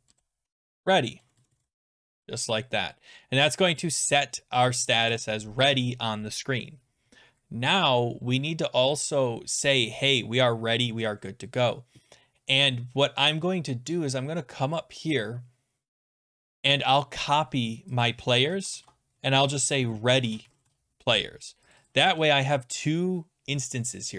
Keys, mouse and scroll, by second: 0.0-2.3 typing, 3.7 click, 3.9-4.9 typing, 12.8-14.1 scroll down 11, 14.1-15.0 scroll, 15.0 click, 15.0-15.9 scroll, 18.0 click, 18.5 ctrl+c, 18.7 ctrl+v, 19.6 click, 20.0-21.2 typing, 21.7 click, 21.9 click, 22.4 ctrl+c, 23.6 r.